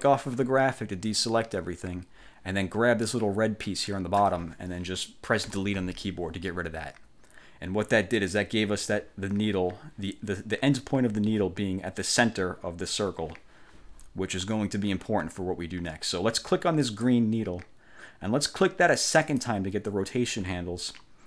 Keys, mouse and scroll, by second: 0.0 click, 3.2-4.5 drag, 5.6 Delete, 16.9 click, 19.3 click.